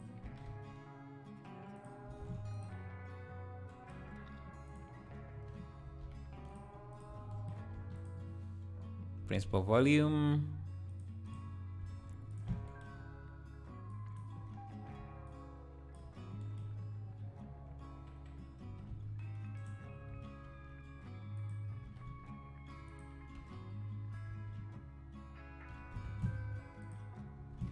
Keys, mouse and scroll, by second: 0.3 s, 2.2 ctrl+a, 3.6 scroll down 1, 4.0 scroll up 2, 4.7-5.8 drag, 5.8 a, 6.0 KP_Decimal, 6.5 click, 6.9 click, 7.0 x, 7.7 shift+scroll up 1, 7.8 shift+a, 12.3 ctrl+shift+click, 12.9 scroll up 2, 13.9 click, 14.4 scroll up 4, 15.2-16.4 shift+drag, 16.7 scroll down 1, 17.6 scroll down 1, 18.7 r, 21.8 s, 23.4 h, 24.5 alt+h, 25.7 g, 27.6 ctrl+s.